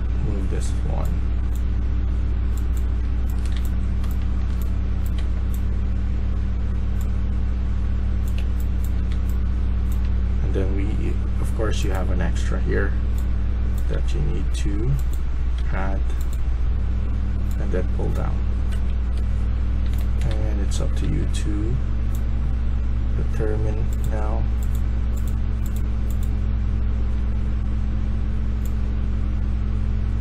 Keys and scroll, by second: 3.0-5.6 typing, 8.1-9.9 typing, 15.5 1, 18.7 Escape, 19.5-21.5 typing.